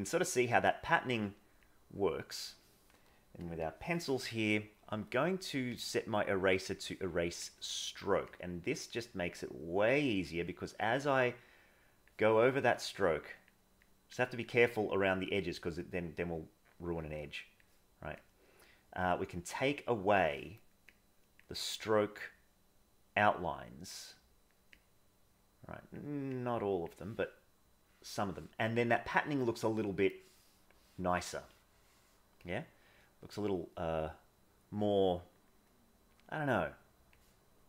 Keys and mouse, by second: 0.3 click, 1.0 click, 1.7 click, 3.6 click, 5.7 drag, 6.7 click, 8.3-12.0 drag, 12.5 click, 12.9 click, 13.9 click, 14.4-17.7 drag, 18.2-20.2 drag, 20.9 click, 21.8-23.9 drag, 24.7-25.9 drag, 26.2 click, 30.4 middle click, 30.9 middle click, 32.3-37.2 drag.